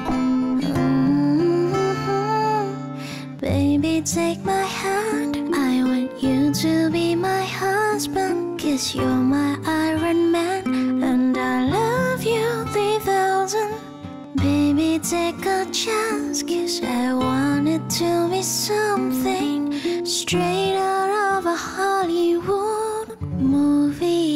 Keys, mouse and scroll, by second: 23.4 ctrl+d.